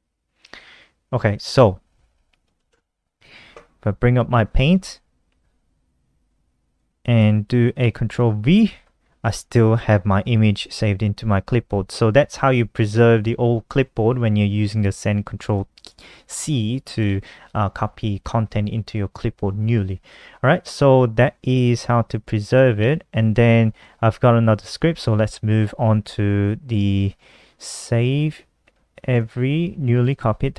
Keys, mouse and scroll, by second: 1.5-2.6 typing, 3.5 click, 6.3 click, 7.3 click, 8.0 ctrl+v, 14.1 click, 15.0 click, 15.3 click, 16.0 click, 20.9 click, 21.3-22.3 scroll down 4, 22.3-23.3 scroll down 3, 23.3 click, 24.5 ctrl+c, 24.8 click, 25.3-26.1 typing, 27.5 Delete, 27.8-28.8 typing, 28.9 Up, 29.2 End, 29.5 Return, 30.0 Up, 30.3 Down.